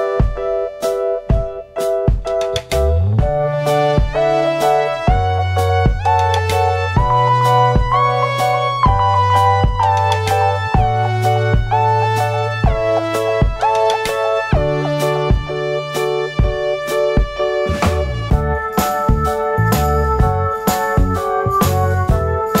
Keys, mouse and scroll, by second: 0.5 ctrl+i, 0.5-2.8 drag, 1.3 `, 2.8 `, 4.0-7.4 drag, 4.4 scroll up 2, 4.4 `, 5.6-6.4 scroll down 4, 5.8 `, 6.4 scroll up 2, 6.6 `, 8.0-9.5 drag, 12.7-15.9 drag, 14.6 scroll up 1, 16.9 scroll down 1, 17.2 alt+a, 17.3 `, 17.4 scroll up 1, 17.7-18.1 scroll down 1, 18.1 s, 18.4-22.6 drag.